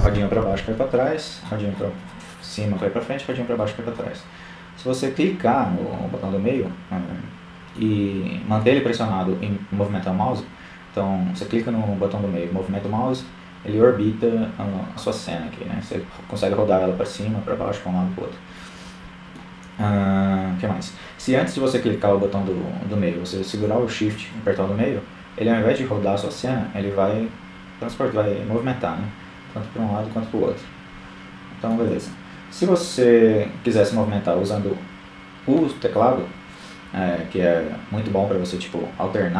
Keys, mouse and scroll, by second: 4.1 scroll down 1, 10.9 middle click, 22.9-24.1 middle drag, 37.7 KP_1.